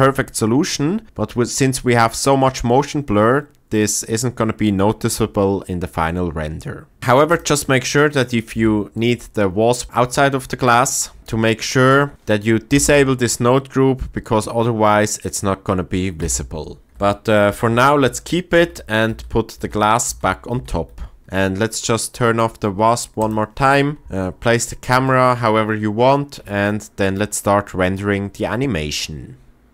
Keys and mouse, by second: 8.5 g, 12.1 Tab, 12.8 m, 16.2 m, 16.9 ctrl+z, 17.6 ctrl+z, 18.1 ctrl+z, 18.7 ctrl+z, 20.0 ctrl+z, 20.7 ctrl+z, 23.2 click, 24.0 KP_0.